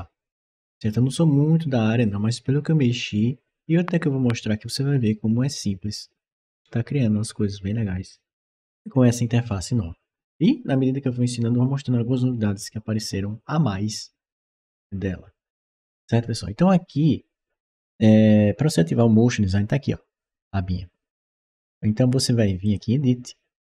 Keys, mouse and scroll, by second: 22.5 click.